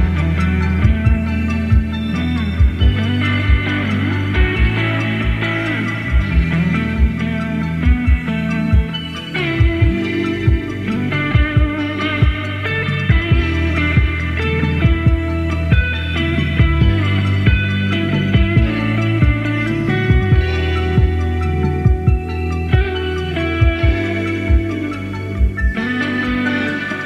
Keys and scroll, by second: 15.7 i, 18.4 super+d.